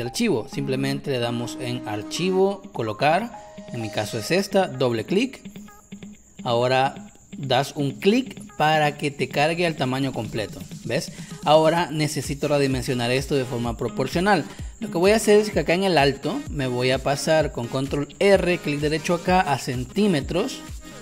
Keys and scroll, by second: 10.0 space, 18.1 ctrl+r.